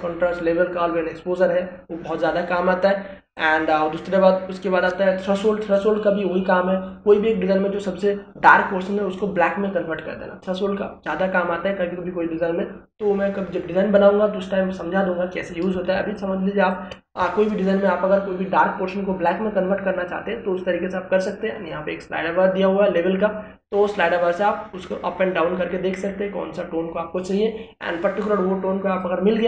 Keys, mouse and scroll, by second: 0.0 click, 4.3 click, 6.6 click, 16.7 space, 17.1-22.2 ctrl+drag, 22.2-29.4 drag.